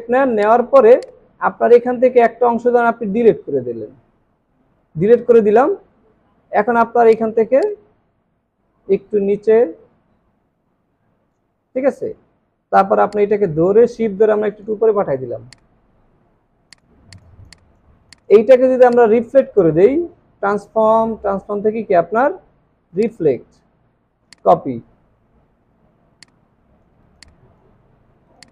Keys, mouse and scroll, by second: 3.3 Delete, 12.1 scroll up 1, 17.1 double click, 17.4 space, 17.5 double click, 18.9 right click, 25.1 alt+scroll up 1, 27.0 space, 28.3 space.